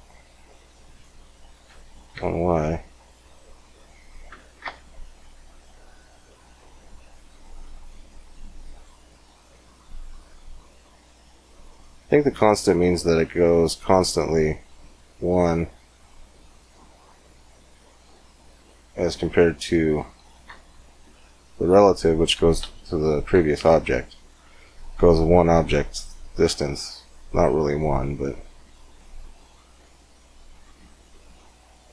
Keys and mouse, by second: 1.1-3.1 drag, 3.6-5.4 drag, 6.2-9.9 middle drag, 11.7-18.4 middle drag, 18.4-21.0 drag, 21.1 middle click, 21.5-31.9 drag.